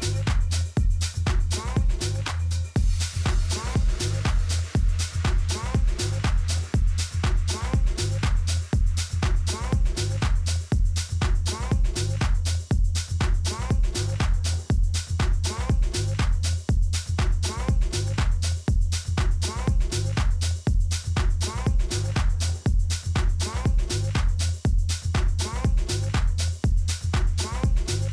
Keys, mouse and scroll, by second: 3.5 n, 4.5-6.8 middle drag, 9.4-11.7 middle drag, 11.7 shift+a, 18.5-23.3 middle drag, 23.3 s.